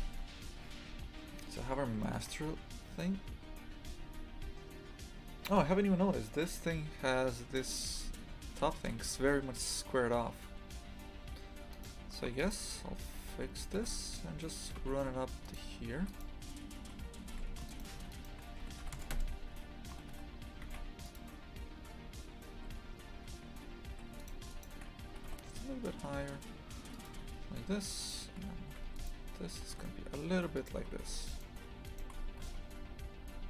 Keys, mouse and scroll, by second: 0.0 Return, 0.8-1.3 scroll up 2, 2.0-2.4 shift+middle drag, 2.4-2.9 scroll up 4, 7.7 right click, 7.9 Tab, 8.7 shift+middle click, 9.0-11.7 scroll up 2, 11.7 right click, 12.2 2, 12.4 right click, 13.3 g, 16.0 1, 16.1 right click, 16.9 g, 17.7 shift+right click, 18.6 s, 24.2 shift+right click, 24.5 shift+right click, 27.9 right click, 28.8 2, 28.9 right click, 31.2 right click.